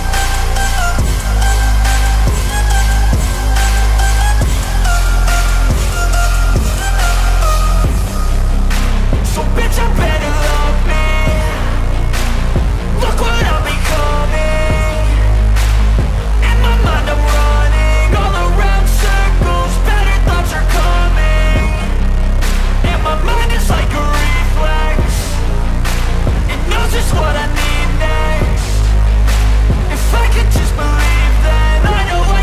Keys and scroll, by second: 2.3 x.